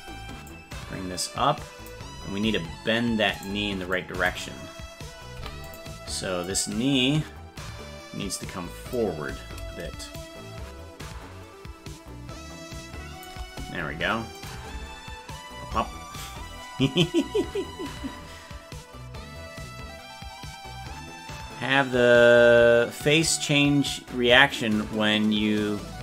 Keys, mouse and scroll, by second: 0.5-1.9 drag, 3.4 right click, 3.9 click, 5.3 i, 6.4-8.9 drag, 10.1-13.2 shift+drag, 14.4 click, 14.7 space.